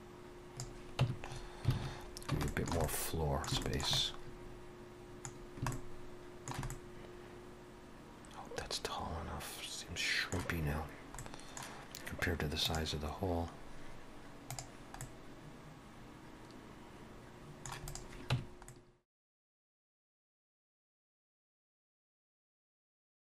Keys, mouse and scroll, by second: 1.0 Tab, 1.3-1.7 scroll up 3, 1.7 alt+a, 2.1 scroll down 2, 2.5 shift+middle click, 2.8 middle click, 3.6 shift+middle click, 4.0 middle click, 5.4 scroll down 1, 5.7 shift+middle click, 6.7 middle click, 11.2 middle click, 15.0 middle click, 17.9 click, 18.3 Tab, 18.7 middle click, 19.2 alt+shift+click, 19.5 shift+e, 19.9 Tab, 20.5 ctrl+2, 20.7 right click, 21.0 alt+a, 21.0 middle click, 21.2 scroll down 2, 21.3 middle click, 21.7 middle click, 22.2 scroll down 2, 22.3 middle click, 22.4 scroll up 2, 22.5 middle click, 22.7 a, 22.8 scroll down 1, 22.9 shift+middle click, 22.9 middle click.